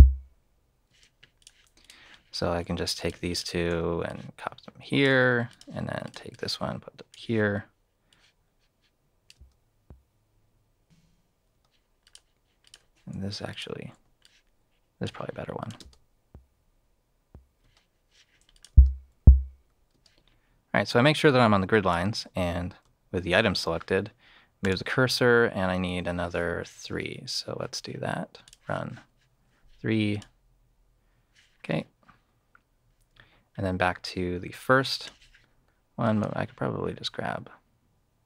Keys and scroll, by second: 0.8 space, 9.3 space, 11.5 space, 13.1 BackSpace, 14.0 super+BackSpace, 15.7 super+space, 17.6 space, 18.7 space, 19.9 alt+space, 23.3 super+c.